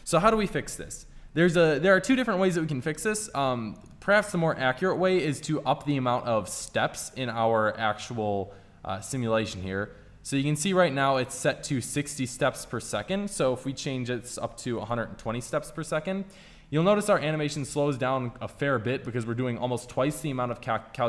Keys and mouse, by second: 1.9-6.1 middle drag, 11.3 middle click, 12.2-14.6 drag, 17.1-18.8 drag, 19.2 middle click, 20.9-21.0 middle drag.